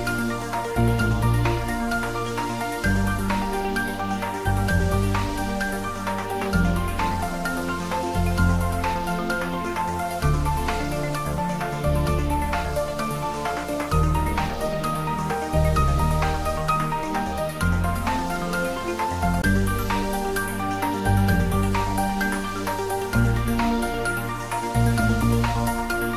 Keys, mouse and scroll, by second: 0.5-4.1 middle drag, 4.1 g, 4.8 y, 5.4 click, 7.9 g, 8.2 y, 9.7 click, 10.0 `, 10.4 3, 11.2 scroll up 1, 11.7 scroll down 1, 12.1 middle click, 13.1 scroll down 1, 13.6-17.4 middle drag, 17.4-19.2 scroll up 1, 20.6 Tab, 21.2 click, 21.4 click, 22.6 i, 23.9 click, 24.2 s, 25.7 click.